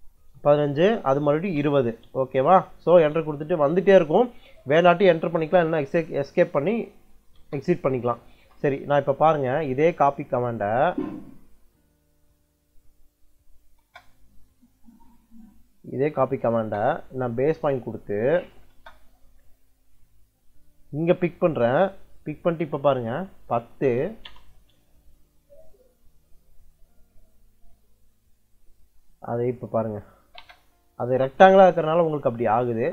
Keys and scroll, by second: 0.0 Return, 1.1 2, 1.9 ', 2.8 Return, 7.2 Return, 13.2 c, 13.7 space, 16.4 space, 18.1 c, 18.6 space, 23.0-24.3 typing, 28.7 Escape, 30.1 l, 30.2 space, 31.2 Escape.